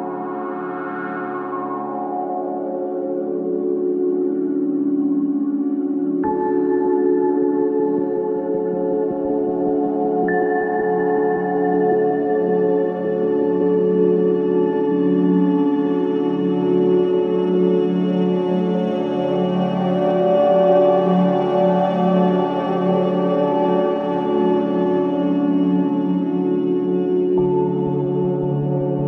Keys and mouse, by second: 1.5 space, 1.7 click, 2.0 space, 4.6 g, 5.0 x, 6.2 typing, 6.3-7.3 drag, 7.3 typing, 8.4-9.9 typing, 10.6 click, 11.2 click, 11.9-13.7 drag, 14.0-14.4 typing, 15.3-16.8 drag, 16.2 typing, 18.0 typing, 19.4-20.9 drag, 21.9-22.3 typing, 23.7 click, 24.4 click, 24.7 typing, 26.2 typing, 27.5-28.7 typing, 28.8 ctrl+z.